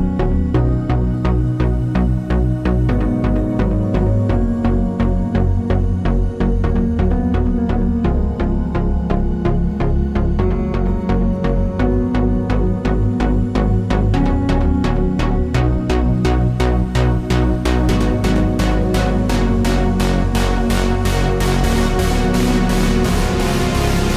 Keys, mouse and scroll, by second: 5.9 click, 8.3 click, 10.1 click, 10.8 click, 18.8 ctrl+i, 19.4 ctrl+z, 20.2 click.